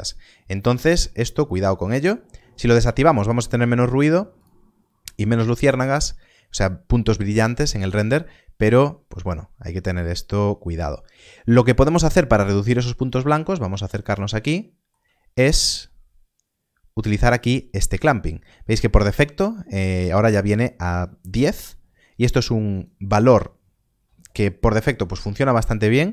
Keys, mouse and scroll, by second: 1.4 click, 4.0 click, 12.8-13.2 scroll up 1, 14.0 shift+middle click.